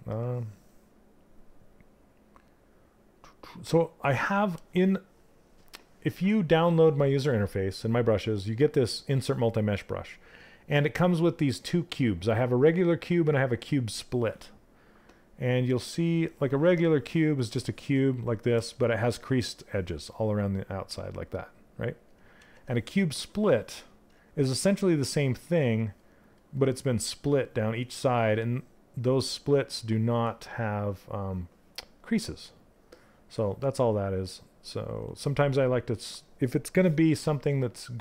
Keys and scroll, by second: 21.9 ctrl+z.